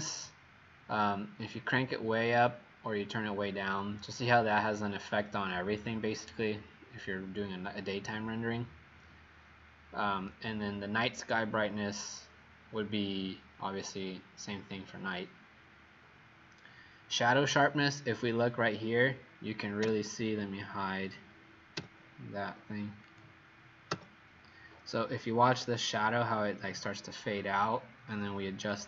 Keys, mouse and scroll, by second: 19.8 h, 23.2 click, 23.9 h, 28.7 click.